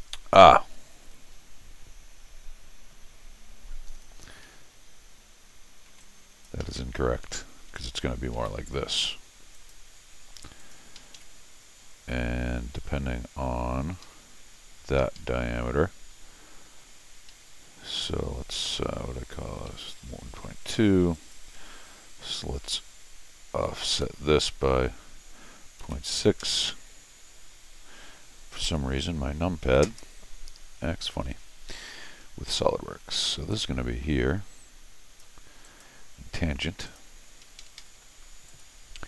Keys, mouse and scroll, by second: 3.9 middle click, 3.9 scroll up 2, 5.9 t, 6.0 click, 6.6 Escape, 6.8 Escape, 8.3 alt+a, 9.5 click, 10.6 click, 11.0 Escape, 11.1 Escape, 14.0 Escape, 15.0 Escape, 15.2 Escape, 15.7 scroll up 2, 17.3 Escape, 18.6 middle click, 18.6 scroll down 1, 19.7 Escape, 21.1 click, 23.9 o, 28.6 ., 29.6 6, 29.8 Return, 32.2 middle click, 33.0 Escape, 33.5-35.2 drag, 35.6 click, 36.8 click, 37.4 Escape, 37.6 Escape, 37.8 Escape, 38.5 click.